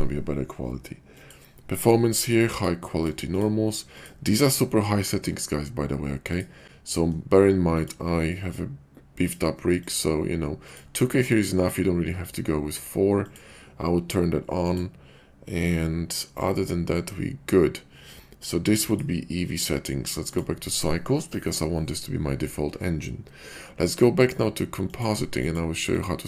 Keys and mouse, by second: 1.2 click, 2.5 click, 3.0 click, 3.9 click, 7.7-9.3 drag, 9.8-10.8 drag, 13.2 click, 14.7 click, 18.9-20.3 drag, 24.9 click, 25.4 click.